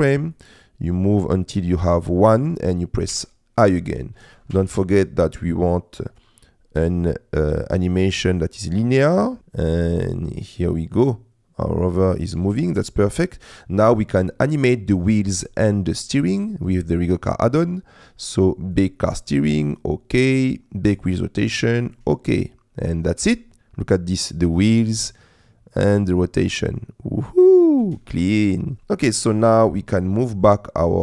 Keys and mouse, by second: 0.4-1.6 drag, 3.2 i, 4.3 click, 4.6 a, 6.3-9.4 drag, 9.4 space, 12.5 space, 12.8 click, 15.6 middle click, 18.8-19.9 drag, 20.8-22.1 drag, 23.2 space, 27.8 space, 28.7 click, 30.3 middle click, 30.8 middle click.